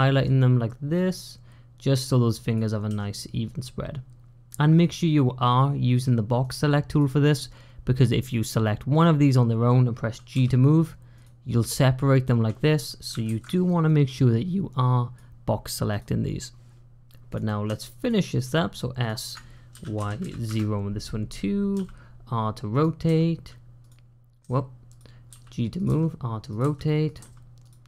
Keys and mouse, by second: 2.4 click, 2.8 g, 5.3 click, 6.3 click, 7.1 click, 8.1 click, 10.2 g, 13.1 ctrl+z, 13.8-15.0 drag, 15.8 click, 17.1 click, 17.9 shift+click, 18.8 shift+click, 19.6 s, 21.6 r, 23.5-27.1 typing.